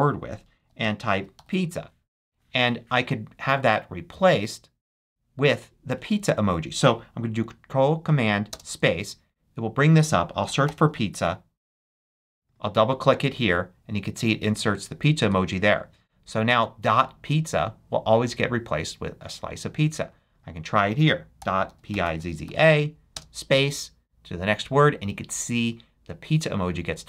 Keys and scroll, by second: 0.3-1.8 typing, 8.5 ctrl+super+space, 10.2-11.6 typing, 15.2 Return, 21.1-23.1 typing.